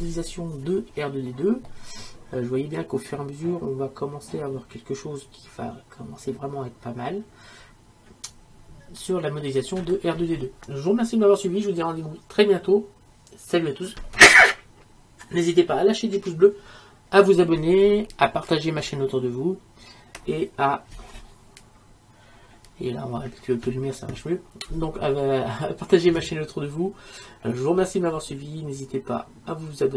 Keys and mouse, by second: 3.5-6.7 middle drag, 8.4-29.9 middle drag.